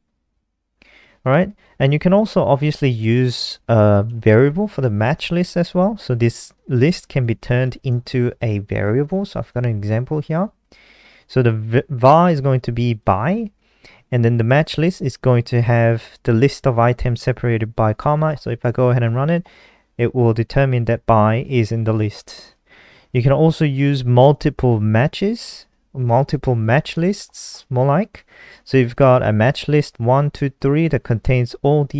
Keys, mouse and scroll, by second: 0.4 click, 0.8-3.4 scroll down 1, 3.4 click, 4.4 ctrl+c, 4.7 click, 6.9 click, 8.5 shift+Home, 8.7 shift+Home, 13.0 click, 18.5 ctrl+s, 18.8 F5, 22.3 click, 23.1-24.3 scroll down 2, 24.3 click, 25.4 ctrl+c, 25.6 click, 27.0 ctrl+v, 27.3 ctrl+s, 28.0 click, 30.7 click.